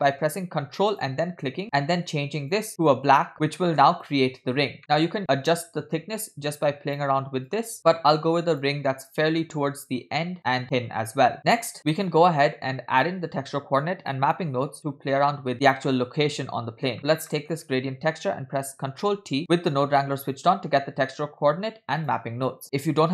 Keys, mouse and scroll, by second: 1.3 ctrl+click, 1.7 click, 2.4 click, 2.7 middle click, 2.8 click, 4.9 middle click, 4.9 scroll up 2, 5.0-7.0 drag, 7.5 click, 9.2-10.8 drag, 11.3-11.7 scroll down 4, 11.5 middle click, 16.8 scroll down 2, 17.0 click, 17.3 middle click, 19.3 ctrl+t, 19.5 middle click, 22.2 click.